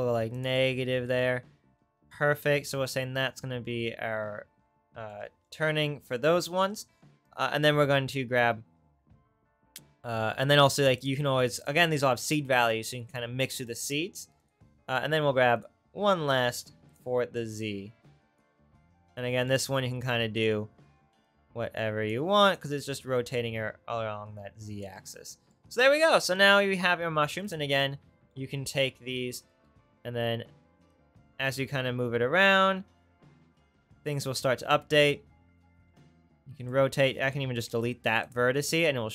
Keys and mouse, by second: 15.7-17.7 shift+right drag, 16.3 shift+d, 20.6 right click, 25.3-27.6 drag, 25.3-30.9 right drag, 26.7 Tab, 28.7 click, 29.7 r, 31.6 g, 36.9 r, 37.7 Delete.